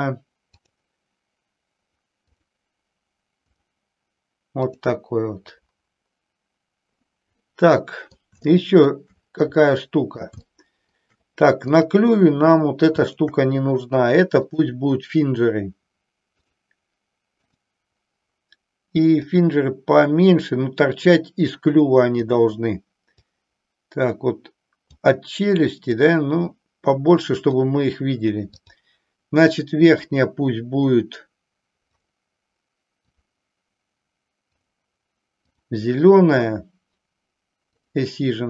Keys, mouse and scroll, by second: 0.6 click, 3.5 click, 4.7 drag, 7.4 middle click, 8.6 shift+middle click, 9.7 middle click, 10.5 shift+middle click, 11.6-12.5 drag, 13.0 shift+click, 14.3-16.6 drag, 17.6 click, 19.2-22.2 drag, 23.3-25.0 drag, 25.9-27.6 drag, 28.6 click, 32.0 click, 33.1 click, 34.6-35.7 drag, 37.7 click.